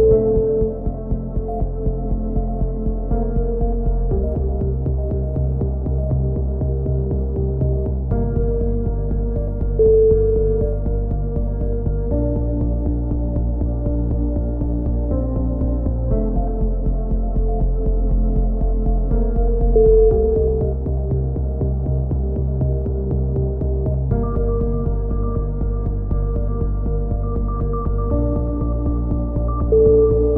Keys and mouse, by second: 4.1 middle click, 4.7-6.3 right drag, 5.7 f, 5.9 a, 6.3-7.4 drag, 7.4 right click, 7.5 click, 7.6-9.6 right drag, 9.2 f, 9.4 a, 10.1 ctrl+r, 11.8 z, 12.4 z, 12.6 a, 12.9 k, 15.5 a, 15.9-17.5 drag, 16.7 a, 16.9 a, 18.2-19.3 right drag, 19.0 x, 20.2 click, 21.5 middle click, 22.3-23.5 drag, 26.6-28.4 drag.